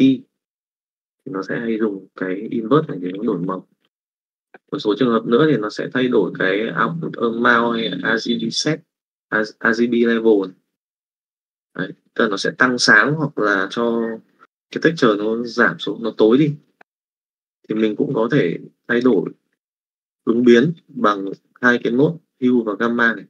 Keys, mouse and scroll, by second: 3.5 x, 17.6 click, 17.7 s, 22.5 click.